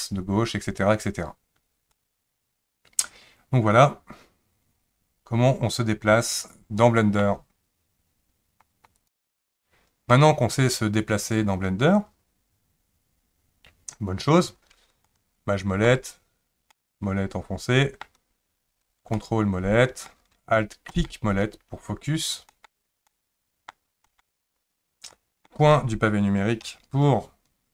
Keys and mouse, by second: 1.9-7.2 middle drag, 10.1-14.0 middle drag, 15.1-15.9 shift+middle drag, 16.7-18.0 middle drag, 19.2-20.1 ctrl+middle drag, 21.0 alt+middle click, 22.5 alt+middle click, 23.1-23.7 middle drag, 24.0 alt+middle click, 25.1-25.5 middle drag, 26.6 KP_Decimal.